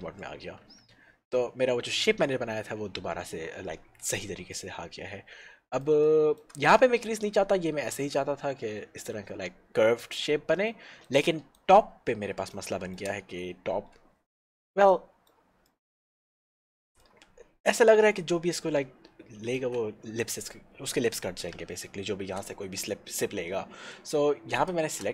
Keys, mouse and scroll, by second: 0.8 Tab, 1.3 middle click, 4.0-4.5 scroll down 1, 4.5 middle click, 6.1 shift+middle click, 10.9 shift+middle click, 11.4 middle click, 11.7 middle click, 12.0 scroll up 1, 12.5 shift+middle click, 13.8 middle click, 14.1 Tab, 14.4-14.8 scroll down 1, 14.9 middle click, 16.8 shift+middle click, 19.7 alt+shift+a, 22.9 shift+scroll down 1, 23.2-24.0 scroll up 1.